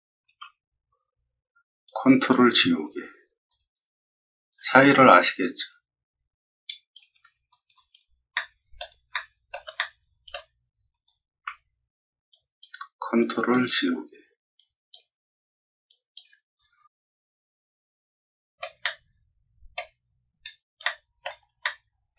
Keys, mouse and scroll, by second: 0.2 ctrl+z, 1.8 ctrl+click, 2.7-4.2 scroll up 6, 4.4 scroll down 2, 4.7 middle click, 6.6 ctrl+click, 7.6-8.0 scroll down 4, 8.3-8.7 middle drag, 9.0 shift+middle click, 9.7 middle click, 10.6 middle click, 10.7 middle click, 12.3 ctrl+click, 13.1 ctrl+click, 14.5 ctrl+click, 15.8 ctrl+click, 16.5 middle click, 17.4 middle click, 17.9 middle click, 18.8 middle click, 20.0-20.5 scroll down 2, 20.8-21.1 shift+middle drag, 21.6-22.1 middle drag.